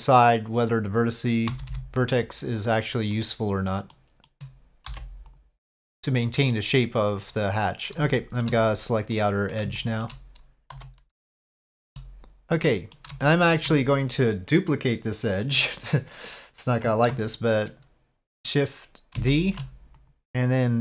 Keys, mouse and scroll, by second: 1.5 g, 4.1 middle click, 4.9 m, 6.2 middle click, 8.0 shift+middle click, 9.1 middle click, 9.7 shift+middle click, 10.9 shift+click, 12.6 middle click, 13.2 shift+middle click, 19.2 shift+d.